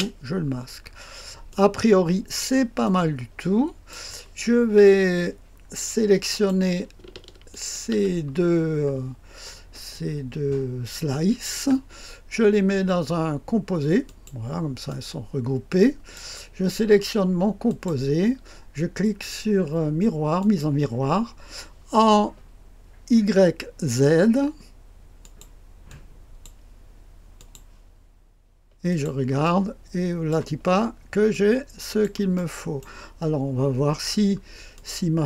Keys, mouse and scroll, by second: 0.3-1.4 scroll down 1, 1.4-2.4 drag, 2.8-3.9 drag, 6.2 click, 7.4-8.5 ctrl+drag, 8.5-9.8 scroll down 1, 9.8-11.5 drag, 14.0 click, 14.9-16.1 drag, 16.7-17.6 scroll down 1, 17.6 click, 20.3 click, 25.1 click, 25.8 click, 27.3 click, 28.8 click, 29.3 click, 30.6-31.8 scroll up 3, 31.2 click, 32.3 middle click, 33.2-34.0 scroll up 2, 34.0-34.7 scroll down 2, 34.7-35.2 drag.